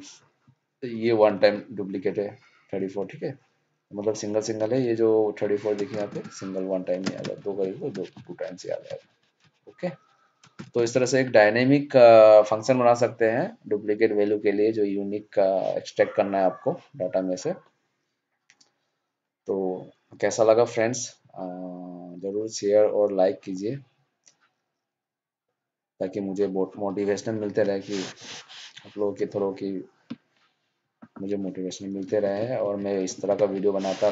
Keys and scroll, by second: 7.5 ctrl+d.